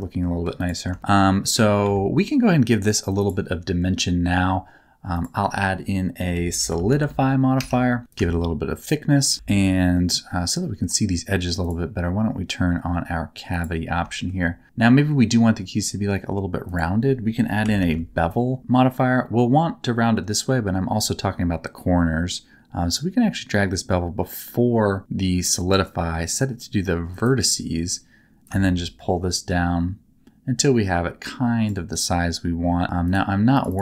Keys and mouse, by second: 1.4 middle click, 1.8 z, 3.2 click, 5.3-7.5 drag, 8.1-9.2 shift+drag, 9.3 z, 9.6 middle click, 11.7-13.9 drag, 14.1 shift+middle click, 14.4 middle click, 15.0 middle click, 16.6-18.6 drag, 22.9-25.4 drag, 27.1 click, 28.4-31.7 shift+drag, 33.1 click.